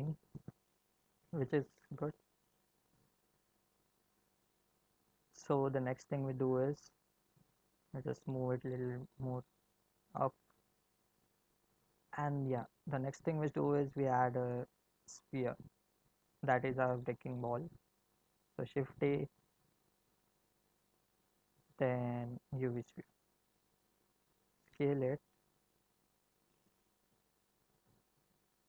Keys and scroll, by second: 0.1 space, 9.6 g, 18.5 shift+a, 24.4 s.